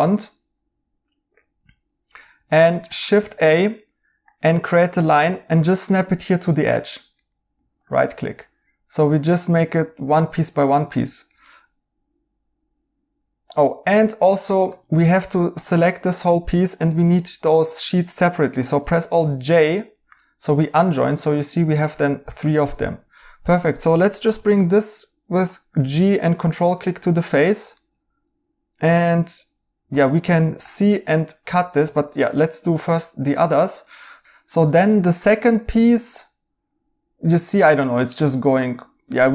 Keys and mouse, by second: 3.1 a, 7.1 right click, 10.9 right click, 14.6 Tab, 18.9 alt+j, 22.6 right click, 23.3-24.7 typing, 27.7 right click, 29.8 c, 31.8 Escape, 32.3 right click, 39.1 right click.